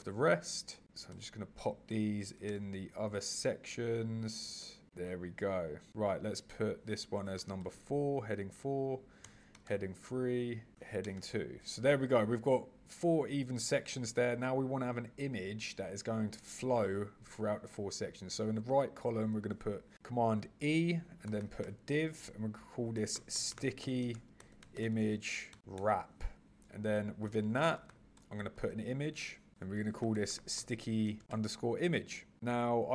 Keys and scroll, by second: 0.0 super+v, 0.8 super+c, 1.1 super+v, 1.9 super+c, 2.4 super+v, 4.6 super+v, 19.3 super+e, 24.1 shift+-, 27.2 super+e, 31.1 shift+-.